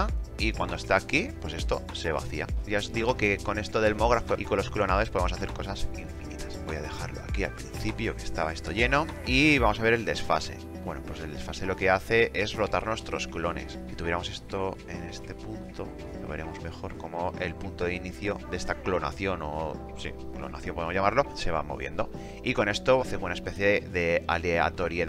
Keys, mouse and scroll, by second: 7.2-7.9 drag, 14.8-15.3 drag.